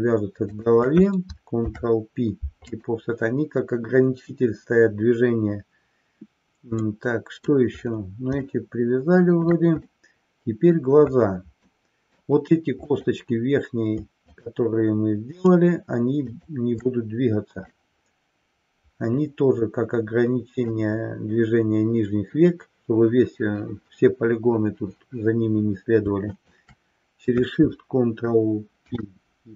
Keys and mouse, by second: 0.5 shift+click, 1.9 ctrl+p, 6.9 middle click, 8.5-9.4 shift+middle drag, 10.0-10.9 middle drag, 11.8 middle click, 12.9 click, 14.4 shift+click, 15.5 shift+click, 16.4 shift+click, 17.9-21.0 middle drag, 28.8 ctrl+p.